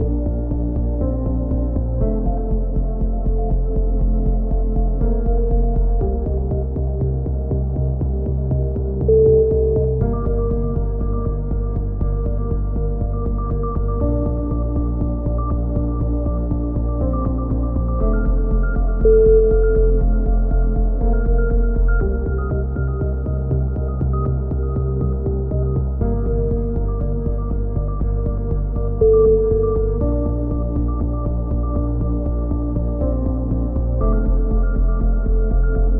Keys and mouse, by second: 0.3 click, 0.6-1.8 middle drag, 1.8 b, 2.0-5.7 middle drag, 2.7 b, 4.4 z, 4.8 z, 5.7 s, 8.8 KP_1, 9.4 a, 9.6 z, 10.5-13.6 drag, 11.4-12.8 middle drag, 11.8 right click, 13.1 KP_1, 13.5 z, 14.2 s, 15.3 click, 15.5 a, 15.6 z, 15.9 a, 16.3 a, 16.4 click, 18.2 ctrl+KP_7, 18.6 z, 24.3 z, 24.6 middle click, 25.3 KP_1, 25.5 z, 26.1 b, 27.9-29.7 middle drag, 28.4 x, 29.7 click, 30.0 a, 30.3 z, 30.5 Tab, 31.0 click, 32.1-34.9 typing.